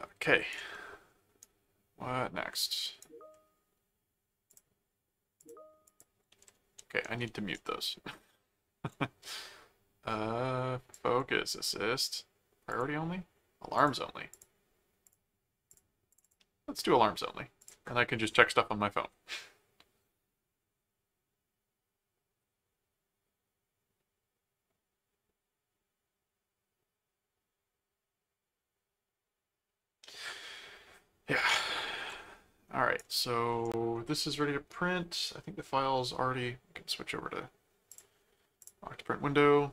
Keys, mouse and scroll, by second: 0.7 middle click, 1.4-3.0 right drag, 4.5 click, 5.4 click, 7.1 super+a, 10.9 click, 12.7 click, 13.8 click, 15.1 click, 15.7 click, 17.6 click, 31.5-33.0 right drag, 37.9 click, 38.6-39.7 drag.